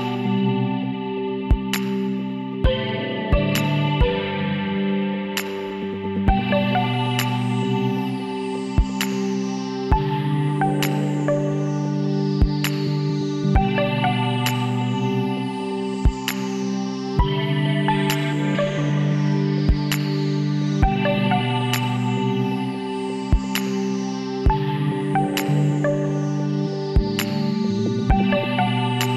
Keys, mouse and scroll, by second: 5.2 middle click, 5.9 Tab, 6.7 middle click, 6.9 middle click, 8.4-10.7 drag, 9.8 a, 11.2 a, 12.2 Tab, 13.4 middle click, 15.6-20.7 middle drag, 20.7 KP_Decimal, 24.3-27.6 middle drag, 27.6 w.